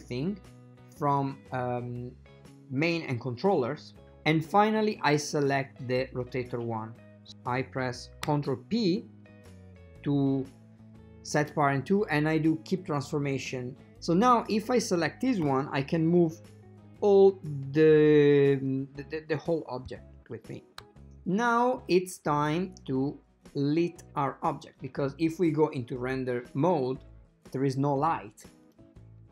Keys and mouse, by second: 1.0 click, 6.2 shift+right click, 9.2 ctrl+p, 14.6 click, 15.5 g, 26.0 click, 28.8-29.3 drag.